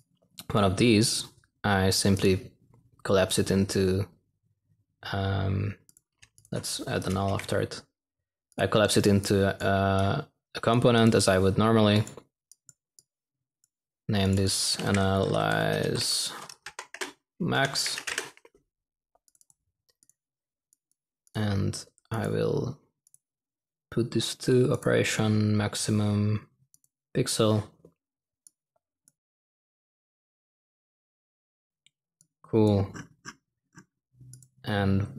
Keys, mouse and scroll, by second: 7.2 n.